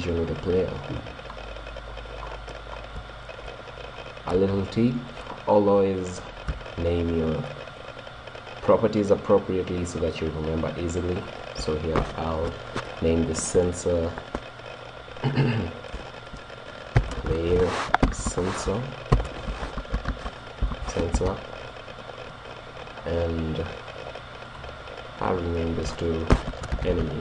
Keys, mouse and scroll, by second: 0.0-5.1 middle drag, 0.9-2.2 drag, 6.6-8.7 middle drag, 11.2-13.0 drag, 22.9 right click, 24.5 middle click, 24.7-27.2 drag.